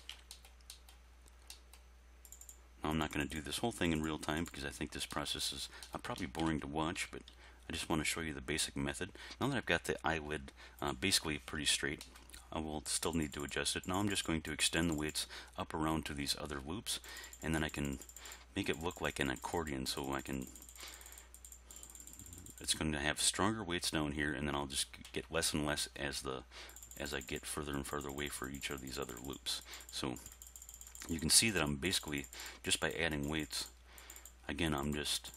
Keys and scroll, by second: 7.0 r, 7.3 x.